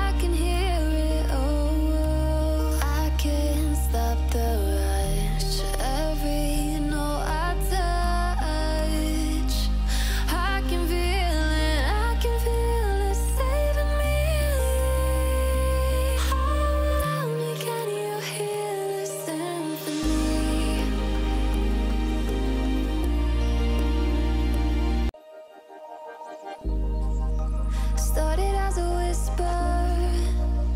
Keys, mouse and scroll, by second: 0.4 click, 2.0-2.4 drag, 6.4 click, 7.6 click, 8.2 alt+scroll down 1, 8.5 alt+scroll up 1, 8.7 F7, 9.0 click, 10.3-11.0 drag, 13.2-13.8 drag, 16.1-16.5 drag, 23.3-23.9 alt+scroll up 1, 24.2-25.7 drag, 26.1-26.6 alt+scroll down 1, 26.9-27.9 drag, 29.9-30.4 alt+scroll up 1, 30.4 click.